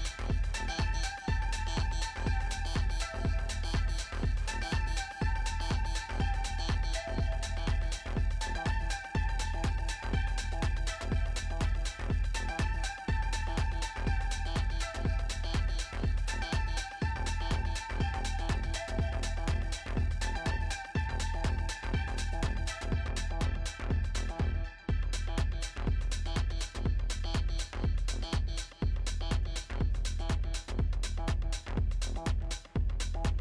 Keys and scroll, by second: 26.5 ctrl+0.